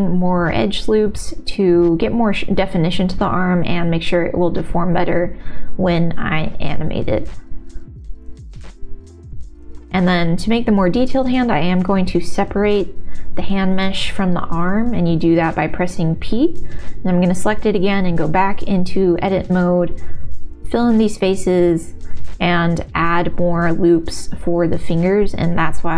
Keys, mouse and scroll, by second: 1.6 ctrl+r, 3.0 s, 3.7 g, 7.5 click, 8.1 ctrl+s, 8.3 Tab, 10.3 alt+shift+click, 11.1 shift+z, 11.2 middle click, 12.7 p, 14.0 Tab, 15.0 click, 15.0 shift+z, 15.4 middle click, 16.0 ctrl+z, 16.0 x, 17.2 x, 17.5 middle click, 18.5 1, 19.5 f, 20.1 shift+click, 20.5 f, 20.8 click, 22.1 shift+r, 22.3 middle click, 22.8 middle click, 24.0 ctrl+r, 25.7 ctrl+r.